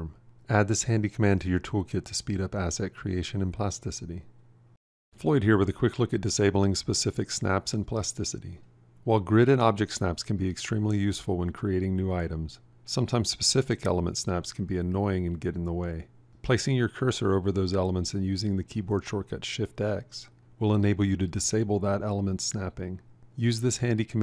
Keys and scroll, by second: 1.1 =, 20.6 shift+x.